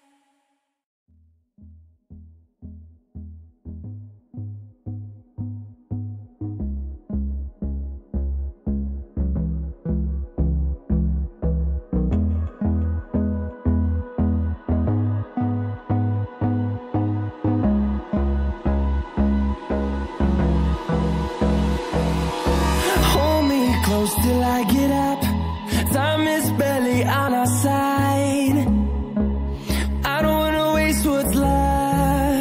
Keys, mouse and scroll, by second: 3.4 click, 6.6 double click, 7.0 click, 7.2 double click, 8.8 click, 8.9 double click, 9.8 scroll up 1, 11.6 click, 13.2 double click, 16.3 click, 17.5 scroll up 1, 18.5 click, 19.5 double click, 20.3 click.